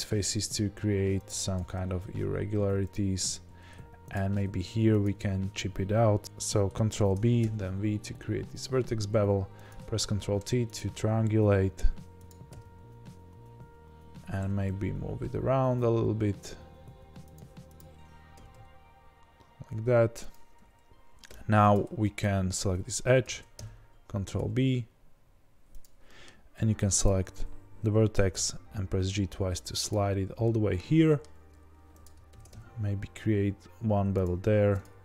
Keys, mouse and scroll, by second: 1.5 g, 4.1 click, 4.3 middle click, 5.0 click, 6.2 ctrl+z, 6.2-10.0 middle drag, 10.0 ctrl+t, 10.7 click, 12.5 g, 17.7 click, 18.3 g, 21.2 2, 21.7 click, 22.0-27.0 middle drag, 23.2 ctrl+b, 26.5 1, 27.0 click, 28.1 g, 30.4-32.0 middle drag, 32.0 click, 32.3 ctrl+b, 34.4 2, 34.8 click.